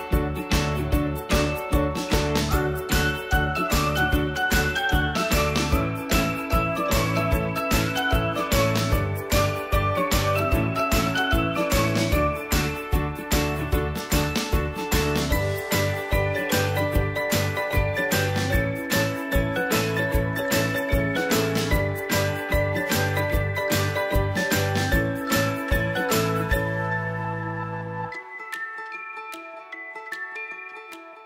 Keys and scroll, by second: 5.3 Right, 10.0 ctrl+v.